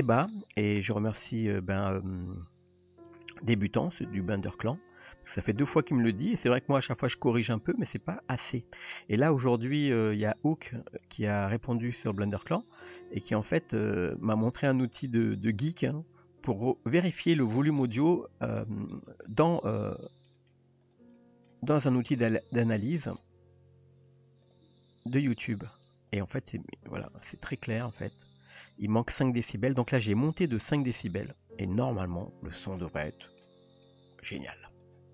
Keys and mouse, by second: 1.8 click, 3.1 middle click, 4.0 shift+middle drag, 4.7 click, 5.2 r, 6.3 g, 7.5 click, 10.0-11.0 middle drag, 11.8-12.1 middle drag, 12.5 click, 12.8-13.5 middle drag, 13.6 g, 14.5-15.0 middle drag, 15.9-17.2 middle drag, 17.8-18.6 middle drag, 20.1 middle click, 20.5 middle click, 20.8 click, 21.2 middle drag, 21.8 shift+click, 22.2-23.2 middle drag, 23.8 r, 24.7 g, 26.2 middle click, 28.0 click, 29.0 s, 29.9-30.4 middle drag, 30.8 drag, 31.6 s, 32.8-33.4 middle drag, 33.8-34.4 middle drag, 34.7 shift+click.